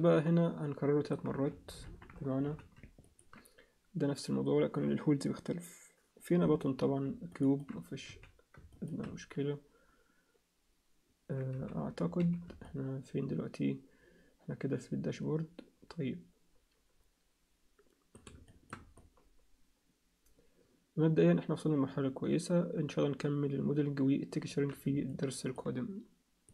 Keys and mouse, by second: 1.8 ctrl+KP_1, 2.4 z, 3.0 ctrl+alt+click, 7.3 alt+shift+middle click, 8.1 z, 11.5 z, 12.2 z, 12.6-18.2 alt+middle drag, 18.4 alt+shift+middle click, 18.9-24.5 alt+middle drag, 25.1 alt+shift+middle click.